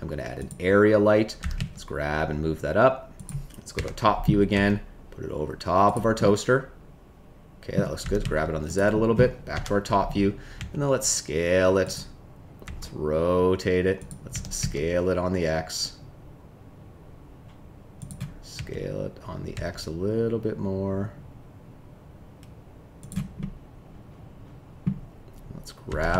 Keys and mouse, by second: 1.4 g, 1.5 z, 3.7 KP_7, 4.5 g, 6.1-7.7 middle drag, 8.0 g, 8.2 z, 9.5 KP_7, 10.5 s, 11.8 click, 12.9 r, 13.9 click, 14.3 s, 14.5 x, 18.5 s, 19.5 x, 23.3-24.8 middle drag, 25.8 g, 26.0 z.